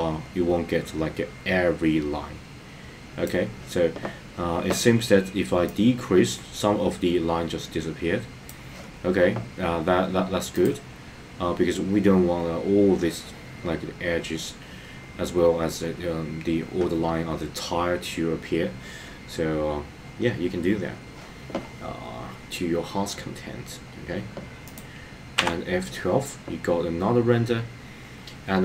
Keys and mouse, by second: 5.8-8.6 drag.